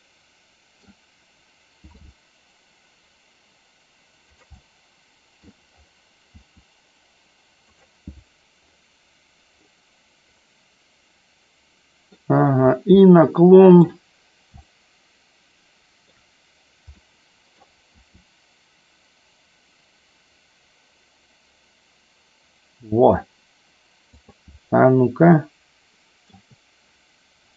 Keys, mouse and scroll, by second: 4.6 middle click, 7.8 click, 10.5-12.1 middle drag, 13.1 middle click, 14.6-16.1 shift+middle drag, 17.0-17.5 middle drag, 17.9 r, 25.4 shift+middle click.